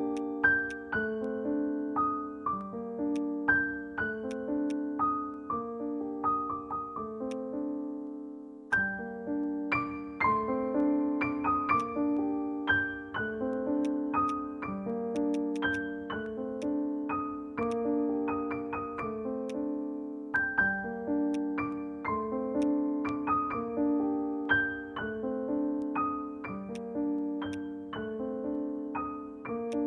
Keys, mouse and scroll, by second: 0.7 alt+click, 2.5 alt+scroll up 1, 2.8 scroll down 1, 3.1 alt+click, 3.4 alt+middle click, 4.7 alt+click, 8.7 alt+click, 9.2 alt+middle click, 15.3 double click, 25.0 ctrl+z, 25.2 ctrl+z, 25.4 ctrl+z, 29.7 right click.